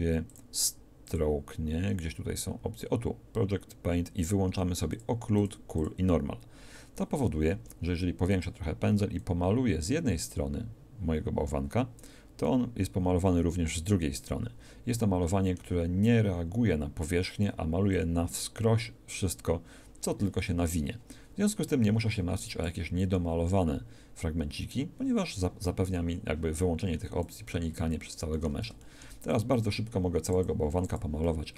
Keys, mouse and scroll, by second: 0.3-1.1 scroll down 1, 1.1 scroll up 1, 1.2-2.2 scroll down 1, 2.2-2.7 scroll down 1, 4.9-7.5 drag, 7.5 f, 9.5-10.9 drag, 12.4-14.0 middle drag, 14.2 middle click, 18.0-20.1 drag, 23.1-24.1 middle drag, 27.8 click.